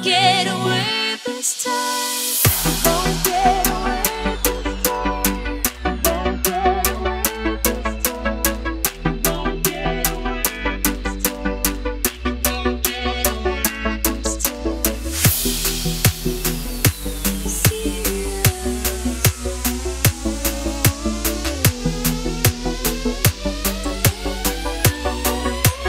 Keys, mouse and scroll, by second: 0.4 click, 0.6 Left, 1.8 Right, 2.2 ctrl+0, 3.3 click, 8.1 click, 14.5 ctrl+s, 15.9 click, 25.5 ctrl+z.